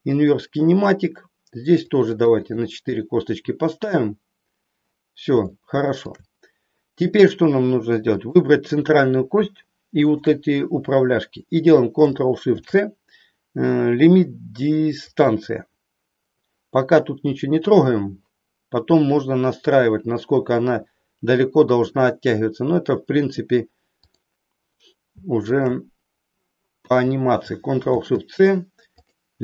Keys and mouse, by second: 1.8 ctrl+shift+click, 2.3 click, 2.6 click, 3.1 click, 5.6 shift+middle click, 8.1 click, 25.4 shift+click.